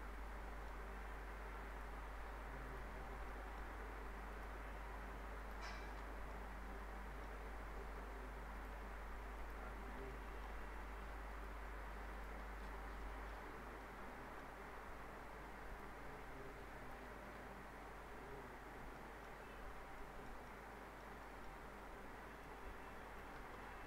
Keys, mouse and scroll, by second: 1.7 click, 2.7 ctrl+click, 3.0 ctrl+shift+e, 3.3 middle click, 4.3 click, 5.4 ctrl+click, 5.7 ctrl+shift+e, 6.0 scroll down 1, 6.3-7.2 alt+middle click, 7.5-8.5 alt+scroll up 1, 8.5 alt+click, 9.7 ctrl+alt+shift+e, 10.1-10.7 alt+middle click, 11.3 alt+click, 12.4 ctrl+alt+shift+e, 12.8 alt+scroll down 2, 13.0 alt+middle click, 13.5 scroll up 1, 13.8-14.4 alt+middle click, 14.6-15.3 scroll up 1, 15.7 click, 16.8 ctrl+click, 17.0 ctrl+shift+e, 18.1-18.6 scroll up 1, 18.6 scroll down 1, 19.0 alt+middle click, 19.4 scroll up 1, 20.0 middle click, 20.5-21.1 alt+middle click, 22.3 click, 23.1 ctrl+click, 23.3 ctrl+shift+e, 23.6 scroll down 1.